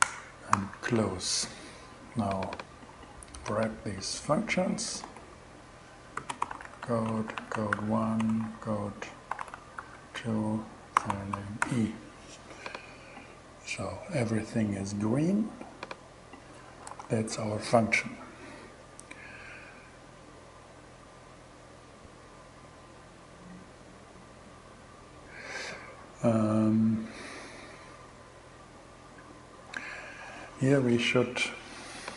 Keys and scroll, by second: 0.0 alt+6, 2.9 super+c, 4.2 Left, 4.5 super+v, 5.6-11.5 typing.